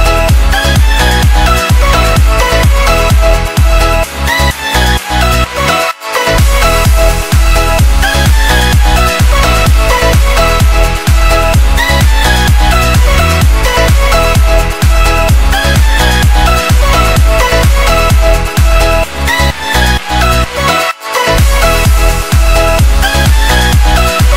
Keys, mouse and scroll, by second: 0.8 click, 2.1 ctrl+s, 3.4 click, 11.4 click, 22.1 click.